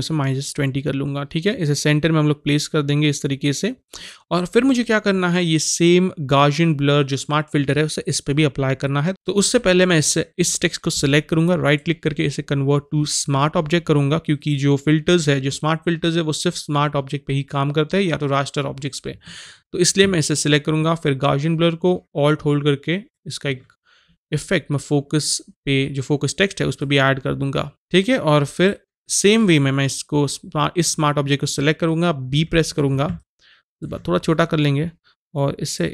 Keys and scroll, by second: 32.4 b, 33.0 alt+b.